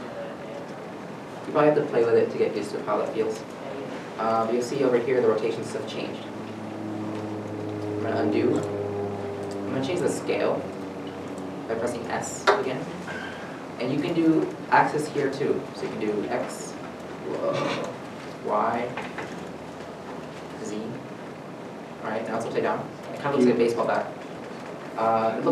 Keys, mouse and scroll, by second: 6.8 r, 6.8 middle click, 7.6 ctrl+z, 9.8 ctrl+z, 9.8 middle click, 10.0 scroll down 1, 10.7 s, 15.2 x, 18.5 y, 20.6 z, 23.2 shift+middle click, 24.2 scroll up 1, 25.3 middle click.